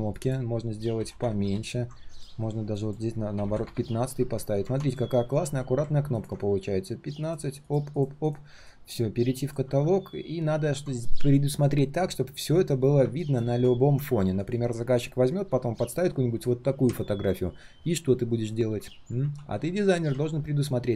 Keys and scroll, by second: 5.2 alt+h, 5.4 alt+v, 19.2 ctrl+z.